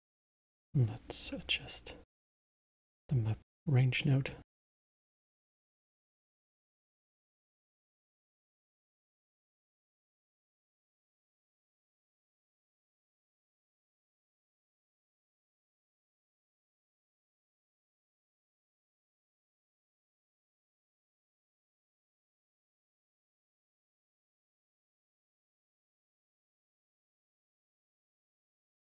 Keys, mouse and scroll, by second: 0.2-3.2 drag, 3.9-4.4 middle drag, 4.4 scroll down 2, 4.9-5.5 middle drag, 5.5 space, 13.6 space, 13.8-15.4 middle drag, 15.4 scroll up 2, 15.9-18.9 middle drag, 19.7-20.9 middle drag, 20.9-23.3 drag, 23.3 scroll down 2, 23.7-24.9 middle drag, 24.9-28.8 drag.